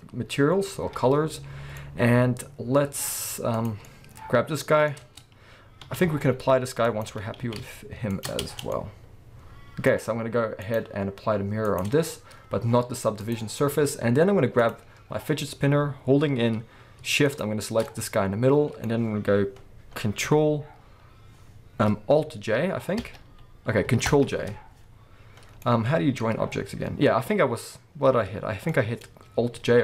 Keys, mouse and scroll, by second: 0.8 KP_1, 3.1-3.5 scroll up 2, 3.5 click, 3.7-7.0 middle drag, 4.9 scroll up 2, 5.0 Tab, 5.8 s, 7.0 click, 7.1 g, 8.2 shift+click, 8.4 Tab, 8.7-10.6 middle drag, 10.6 click, 11.6-13.3 drag, 14.6 click, 17.3 shift+click, 17.8-29.8 middle drag, 18.8-21.3 scroll up 2, 21.3-22.9 scroll up 1, 25.3 ctrl+j, 29.4 Tab.